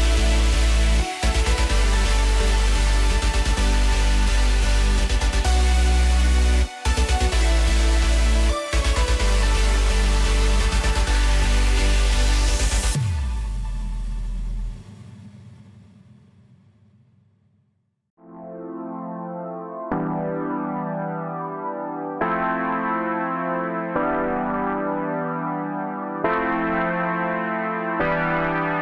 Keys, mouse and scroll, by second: 1.3-1.8 scroll down 5, 3.1 s, 5.2 x, 6.4-6.7 scroll up 1, 6.7-7.0 scroll down 3, 7.2-8.3 middle drag, 8.3-8.6 scroll up 2, 8.6-9.0 scroll down 2, 9.0-12.0 middle drag, 12.7 Tab, 13.2-13.5 scroll up 1, 13.5 scroll down 3, 13.8-14.9 middle drag, 14.9-16.5 scroll up 1, 18.5-19.5 drag, 19.8-22.9 drag, 25.6 KP_0, 27.7 click.